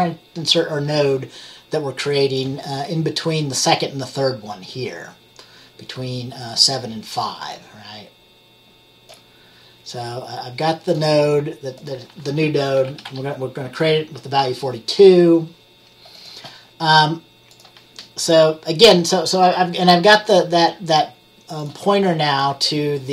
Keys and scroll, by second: 12.8-13.7 typing.